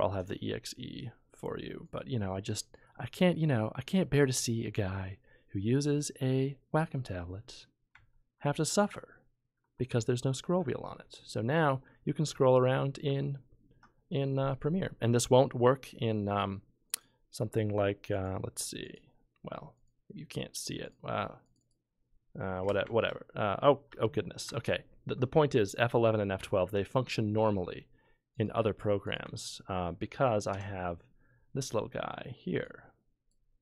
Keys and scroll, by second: 22.6 F12, 22.8 F11, 23.2 F11, 23.9 F11, 26.4 F12, 30.5 ctrl+F13.